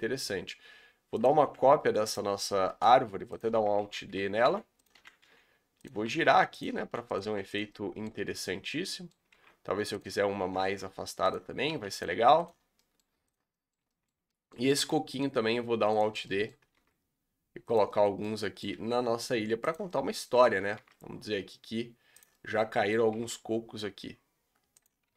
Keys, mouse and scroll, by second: 1.5 r, 2.8 Delete, 3.4 click, 3.8 alt+d, 4.5 g, 4.9 r, 6.2 s, 6.9 g, 7.2 r, 7.7-8.2 middle drag, 8.2 scroll down 3, 8.3-9.2 middle drag, 9.2 scroll up 1, 9.3 shift+d, 10.4 r, 11.6 s, 12.1 r, 12.6 scroll up 2, 12.7-13.3 middle drag, 13.3 click, 13.5-14.1 middle drag, 14.1 scroll up 2, 14.3-14.8 middle drag, 14.8 alt+d, 16.1 scroll down 1, 16.2-16.8 middle drag, 16.8 alt+d, 17.9-18.7 middle drag, 18.7 g, 19.9-20.8 middle drag, 20.8 alt+d, 22.3-23.2 middle drag, 23.2 alt+d, 25.0 r.